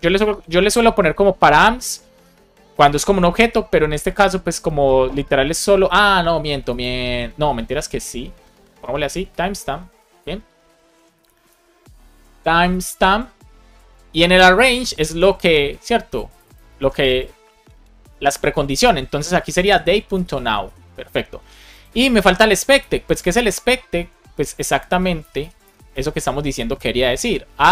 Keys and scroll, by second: 0.2 BackSpace, 2.1 BackSpace, 3.3 alt+shift+Left, 15.0 Return, 16.7 super+c, 17.9 space, 19.3-21.0 typing, 22.1 Return, 22.8 space, 24.0 Return, 25.5 space, 27.0-27.7 typing.